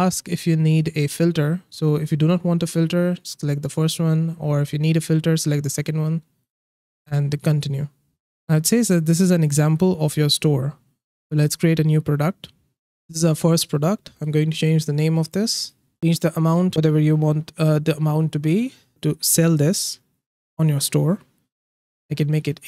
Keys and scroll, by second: 22.0 8, 22.3 0.